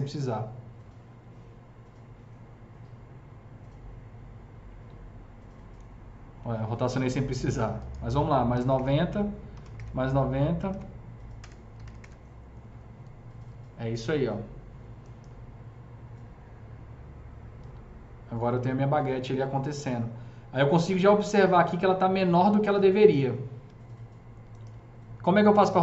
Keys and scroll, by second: 8.5 KP_9, 8.5 KP_0, 8.7 Return, 9.4 KP_9, 9.5 KP_0, 9.6 Return, 11.2 KP_0, 11.3 BackSpace, 11.6 KP_9, 11.8 KP_0, 11.8 Return, 24.7 w.